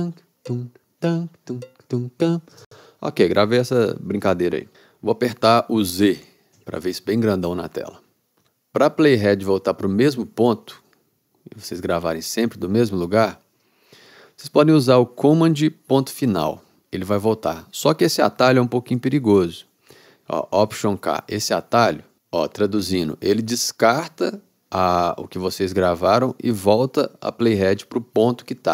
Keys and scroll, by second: 2.6 space, 6.6 z, 16.4 super+., 21.0 alt+k.